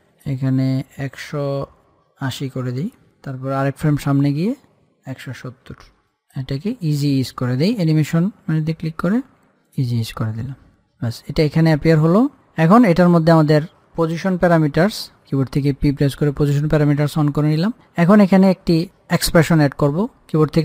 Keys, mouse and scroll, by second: 4.1 Page_Down, 5.0 click, 6.4 click, 9.9-12.9 drag, 15.5 p.